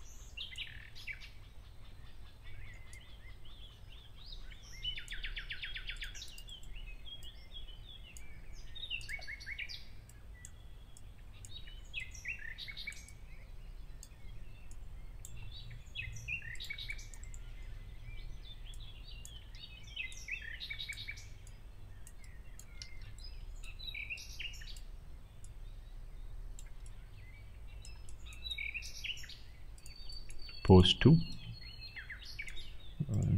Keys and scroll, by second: 19.5 ctrl+z, 22.7 ctrl+z.